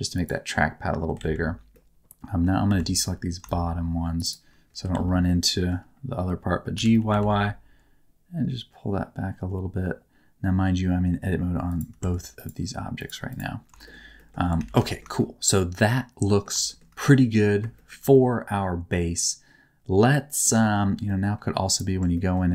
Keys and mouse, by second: 0.1 click, 1.1 alt+z, 1.7 middle click, 2.6 c, 4.1 shift+click, 4.8 alt+z, 5.2 middle click, 6.7 g, 6.9 y, 7.1 y, 11.6 click, 12.0 Tab, 13.2 click, 13.8 middle click, 14.1 middle click, 14.5 alt+a, 14.8 shift+middle click, 15.1-16.4 middle drag, 16.6 middle click, 16.9 middle click, 17.7 shift+middle click, 18.1-20.4 middle drag, 20.5 shift+middle click, 21.0 middle click, 21.9 Tab, 22.1 middle click.